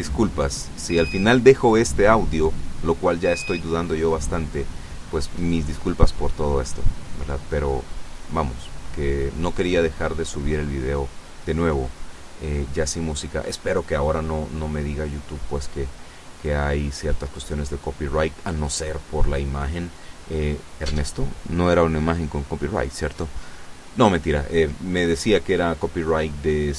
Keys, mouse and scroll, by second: 0.6 right click, 1.8 shift+right click, 3.6 ctrl+p, 4.3 ctrl+Return, 5.8 right click, 6.9 r, 7.7 Escape, 9.6 right click, 10.9 click, 11.3 middle click, 12.4 scroll up 1, 13.0 KP_0, 19.4 i, 22.3 click, 24.6 right click.